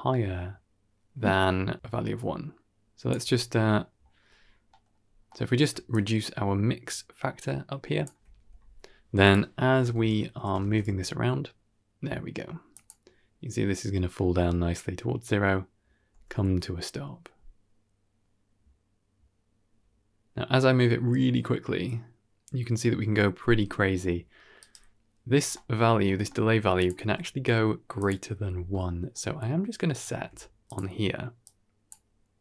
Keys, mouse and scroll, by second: 0.4-0.9 scroll up 2, 3.0 click, 3.6 middle click, 4.3-5.4 scroll up 4, 4.6 middle click, 5.2 middle click, 5.8-7.9 shift+drag, 9.1 click, 9.8 shift+space, 10.5 shift+space, 10.7 g, 16.0 g, 25.4 middle click, 25.8 scroll up 4, 26.1 middle click, 26.7 click, 26.9 g, 28.6 middle click, 29.2 scroll down 1, 29.3 middle click, 29.8 click, 30.0 shift+d, 31.3-31.8 drag.